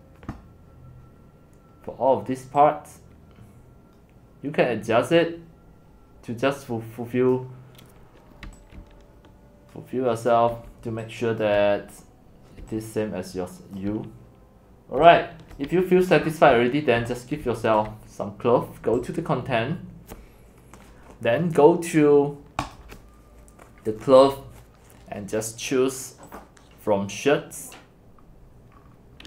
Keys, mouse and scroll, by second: 7.3 click, 8.4-13.9 typing, 13.9-15.0 drag, 15.0 c, 15.6 click, 15.7 x, 16.1 right click, 16.3 middle click, 16.3 scroll down 1, 16.3 scroll down 1, 16.4 scroll down 1, 16.5 scroll down 1, 16.6 scroll, 16.6 scroll down 1, 16.7 scroll down 1, 16.8 scroll down 1, 17.0 x, 17.4 c, 17.8-19.1 drag, 22.6 click, 26.3 click, 28.2 scroll, 28.8-29.2 scroll.